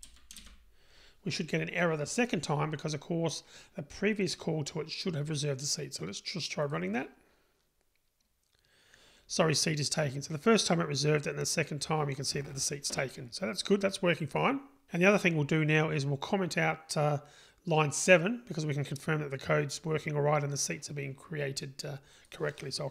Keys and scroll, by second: 6.7 super+r.